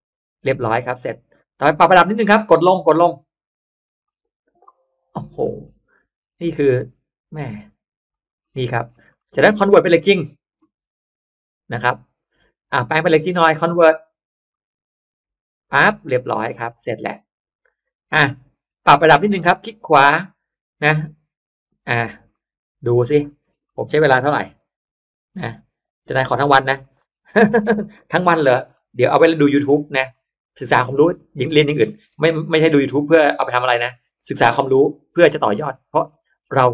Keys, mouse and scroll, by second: 0.3-1.2 scroll down 2, 0.7 middle click, 1.2-1.7 scroll up 1, 3.9 click, 5.1 click, 5.5-5.9 middle drag, 5.9-7.1 scroll up 3, 7.3 click, 8.0 click, 8.3-9.6 scroll down 3, 9.1 middle click, 14.4 click, 16.1-17.8 scroll up 1, 16.1 middle click, 16.5 space, 17.4 middle click, 17.8 scroll down 2, 17.9 space, 18.0-18.4 scroll up 2, 18.6 scroll down 1, 19.3 right click, 21.5 click, 21.9 middle click, 22.1 scroll down 1, 22.2 middle click, 22.9 scroll down 1, 23.2-23.6 middle drag, 23.7 middle click, 24.3 middle click, 24.3 m, 25.2 click, 25.7 Up, 26.3 Up, 26.7 click, 27.0-28.4 scroll down 3, 27.9 middle click, 28.6 middle click, 29.1-29.8 scroll up 2, 29.1 space, 29.6 middle click, 29.8 scroll down 1, 30.0-30.7 scroll up 1, 30.7-31.7 scroll down 2, 31.1 middle click, 31.7-32.1 scroll up 1, 32.6 right click, 35.0 click, 35.5-35.9 scroll up 1, 36.1 middle click.